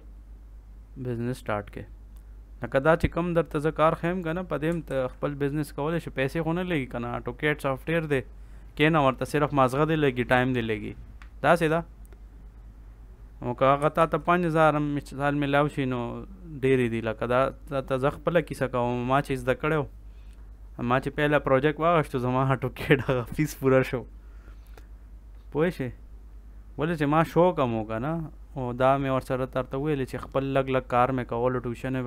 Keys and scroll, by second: 4.8 ctrl+s, 13.9 ctrl+s.